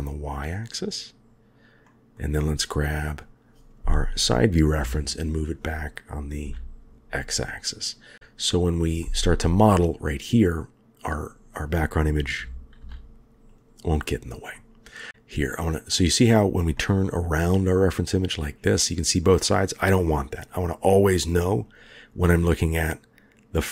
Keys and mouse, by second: 1.8 middle drag, 2.5 click, 4.8 g, 8.1 g, 9.0-9.5 middle drag, 12.3 g, 14.5-15.1 drag, 15.1-16.2 middle drag, 16.7-20.6 middle drag.